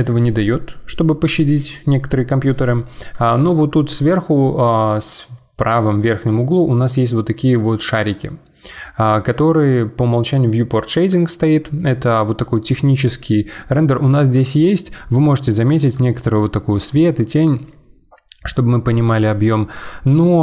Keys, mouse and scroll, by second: 13.9-14.3 scroll up 2, 14.3-14.8 middle drag, 14.8-15.1 scroll up 2, 15.1-15.9 middle drag, 15.9 click.